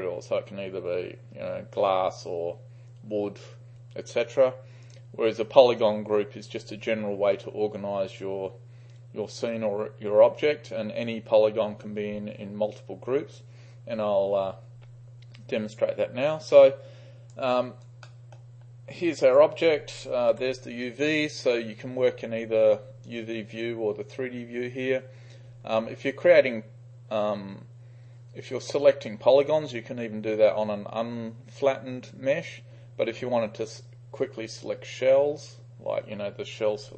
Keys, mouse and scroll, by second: 4.9 click, 5.7 click, 16.6-17.4 drag, 17.7 right click, 18.1 middle click, 19.1 click, 20.4 u, 20.9-21.5 right drag, 24.4 3.